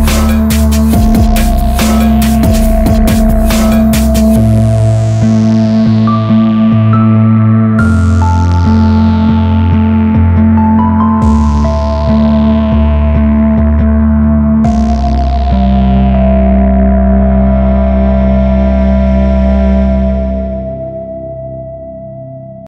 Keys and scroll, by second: 1.9 Return, 4.4 space, 8.8 space.